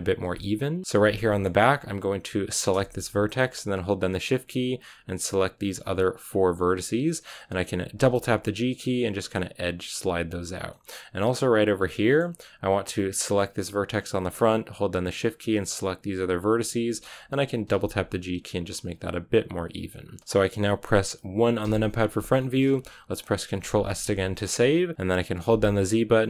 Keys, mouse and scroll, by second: 0.1 g, 0.7 middle click, 0.8 scroll up 1, 0.9-2.3 shift+middle drag, 2.3 right click, 2.5 scroll down 2, 2.7-3.7 shift+middle drag, 3.7-4.7 shift+right drag, 5.4-6.4 shift+right drag, 6.4-7.3 scroll up 1, 7.3-7.8 scroll up 1, 7.8 scroll up 1, 7.9 g, 10.6-12.2 middle drag, 12.2 scroll down 1, 13.2-17.5 right drag, 17.5 g, 19.9 scroll down 3, 20.1-21.5 middle drag, 21.5 KP_1, 22.3 shift+middle click, 22.5-23.6 scroll up 2, 24.1-26.2 shift+middle drag.